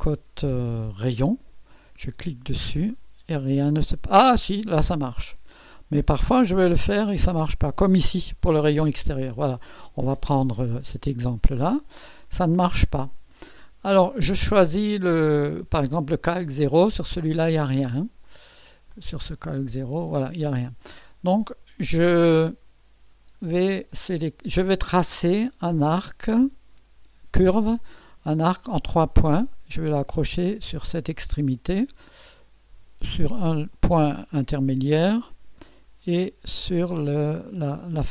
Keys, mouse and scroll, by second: 1.2 click, 2.9 click, 5.5 click, 7.2 click, 8.4 click, 9.4-9.7 scroll up 1, 11.7 scroll down 1, 16.4 click, 18.0 click, 18.9 click, 19.4 click, 20.1 click, 28.5 click, 31.3 click, 33.7 click.